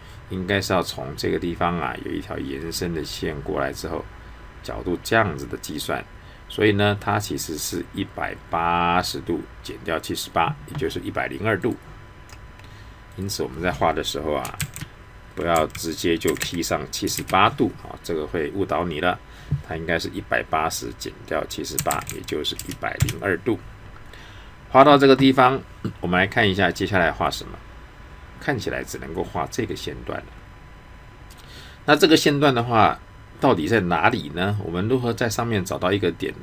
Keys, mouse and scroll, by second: 11.6 click, 14.6 shift+2, 16.2 typing, 21.7 typing, 22.6 Return.